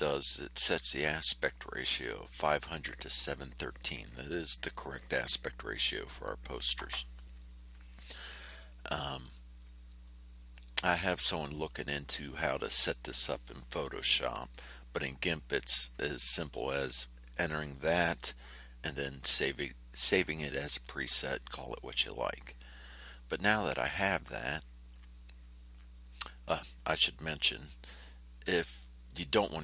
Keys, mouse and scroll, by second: 0.9-2.0 drag, 9.2 click.